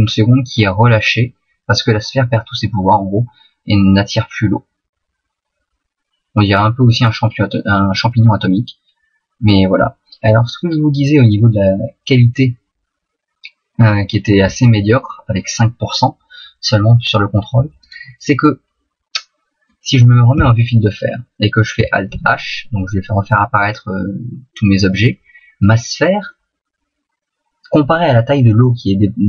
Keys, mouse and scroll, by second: 17.8 right click, 18.4 middle click, 20.3 z, 22.2 alt+h, 23.3 middle click, 25.6 right click, 26.3 middle click.